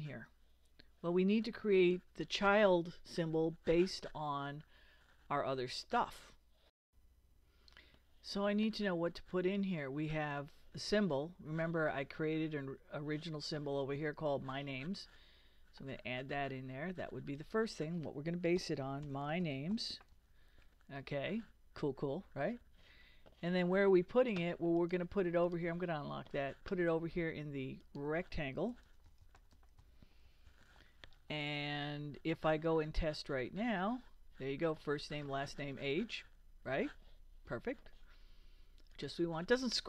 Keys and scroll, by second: 18.3-20.6 typing, 28.6-31.1 typing, 32.9 super+Return.